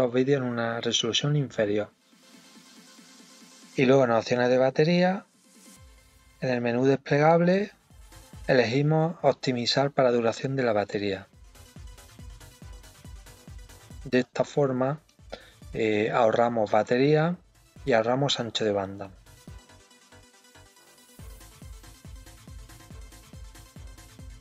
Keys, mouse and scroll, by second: 5.6 click, 8.0 click, 12.7-18.7 drag, 23.4-24.4 drag.